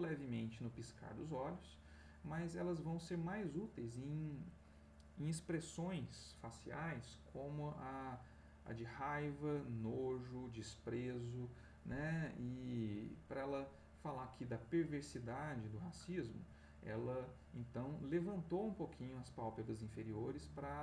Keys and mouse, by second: 8.0-20.8 drag.